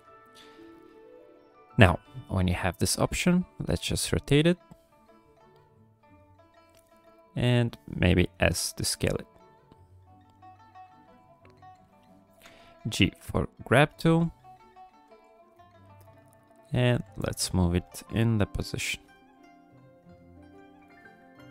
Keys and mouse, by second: 0.7 shift+click, 3.1-6.2 drag, 6.8 middle click, 8.3 s, 12.3 b, 14.0 g, 15.1 f, 15.7 click, 16.7 f, 17.2 click, 17.8 f, 18.4 click, 19.0 f, 19.4 click, 20.1 click.